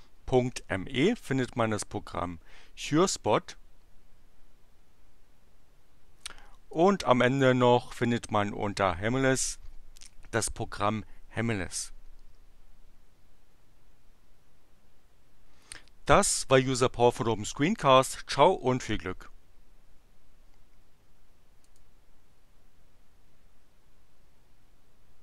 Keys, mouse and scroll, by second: 6.7 click, 21.6 click.